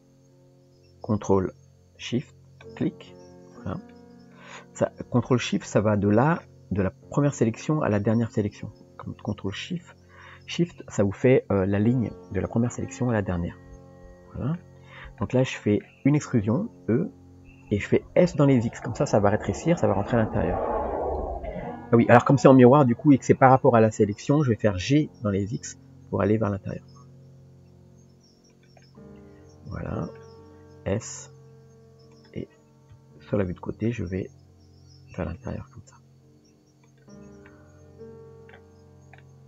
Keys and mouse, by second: 2.7 ctrl+shift+click, 3.9 middle click, 5.0 click, 5.6 middle click, 7.6 middle click, 9.5 ctrl+shift+click, 13.1-14.6 middle drag, 15.3 middle click, 28.8-30.2 middle drag, 32.9 KP_3, 33.9 g, 36.1 r, 37.5-38.5 middle drag, 39.2 middle click.